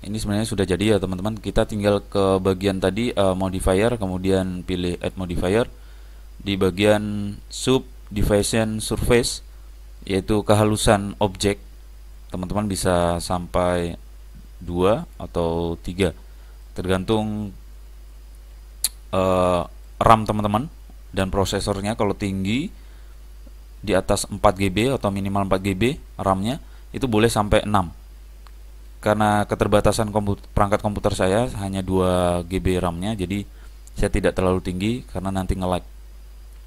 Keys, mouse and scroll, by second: 0.4-2.3 middle drag, 5.1 click, 13.1 click, 15.3 click, 16.8-18.7 middle drag, 17.0 click, 20.7-22.3 middle drag, 29.0-30.6 middle drag, 30.7 middle click, 32.0-33.8 middle drag, 35.1-36.6 middle drag.